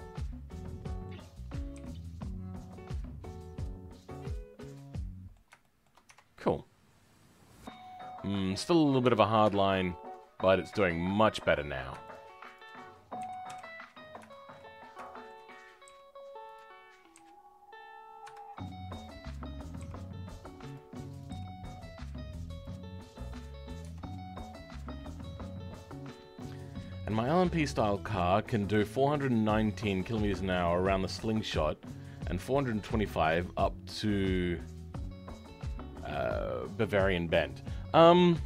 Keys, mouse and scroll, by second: 1.7 g, 4.4 scroll down 2, 4.7-6.0 middle drag, 6.0 Tab, 6.3-9.0 middle drag, 9.0 Tab, 9.5-11.1 shift+middle drag, 11.1 click, 13.2 KP_1, 13.9 scroll up 2, 14.2 shift+middle click, 14.7 scroll up 2, 15.0 shift+middle click, 15.8 g, 23.4-23.8 scroll down 2, 23.8 Tab.